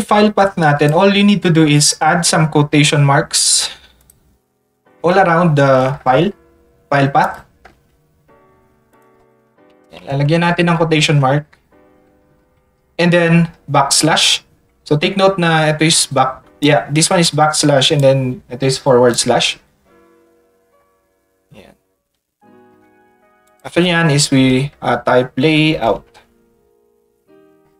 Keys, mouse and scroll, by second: 4.0 click, 7.2 ctrl+click, 8.9 click, 16.6 click, 17.2 click, 18.0-19.1 drag, 23.4 ctrl+click, 25.5 a, 26.1 space.